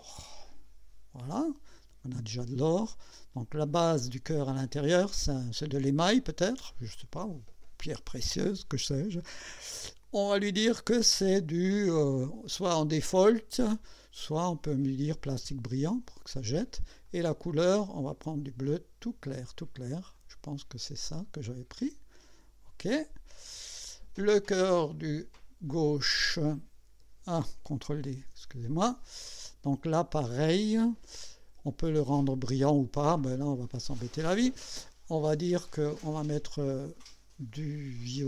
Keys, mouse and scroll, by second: 0.1 click, 1.7 click, 3.6 click, 14.2 click, 15.5 click, 17.1 click, 20.2 click, 21.5 click, 22.8 click, 23.5 click, 26.2 click, 28.1 ctrl+d, 33.7 click, 37.5 click.